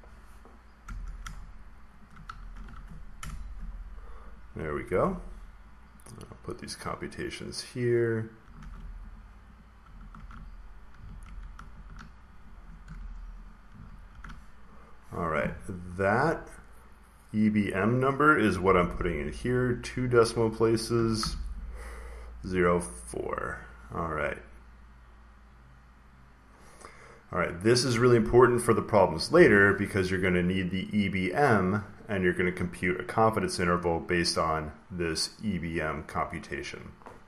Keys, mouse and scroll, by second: 1.1 typing, 1.9 shift+click, 2.5 ctrl+c, 3.1 Return, 4.2 click, 4.8 ctrl+v, 5.8 click, 6.6 click, 6.7 click, 8.1 click, 8.5 ctrl+c, 9.0 click, 9.4 click, 10.1 ctrl+v, 11.1 ctrl+z, 13.1 Escape, 13.4 click, 14.1 ctrl+v, 14.7 click, 16.0 click, 18.3-19.3 typing, 20.6-21.4 typing, 23.0 click, 27.3 click, 30.6 click, 31.2 click.